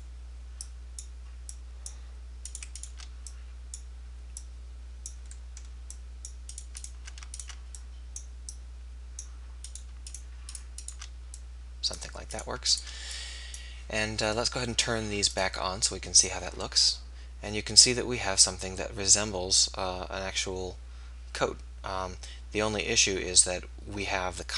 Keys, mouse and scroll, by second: 1.7 click, 4.6-6.5 drag, 10.3-13.0 right drag, 11.5-13.4 drag, 13.2 right click, 13.4-14.7 middle drag, 15.3-18.2 drag, 16.7-17.8 middle drag, 16.7-17.8 right drag.